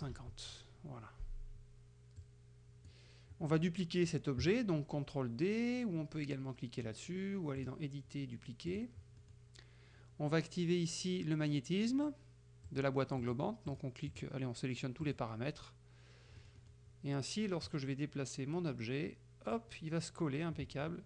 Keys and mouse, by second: 0.2 Tab, 2.2-3.1 drag, 3.6 middle click, 7.7 click, 8.7 click, 9.2 middle click, 12.8 click, 13.2 click, 13.8 click, 14.2 click, 15.1 click, 16.4 middle click, 17.7-19.8 drag, 20.8 middle click.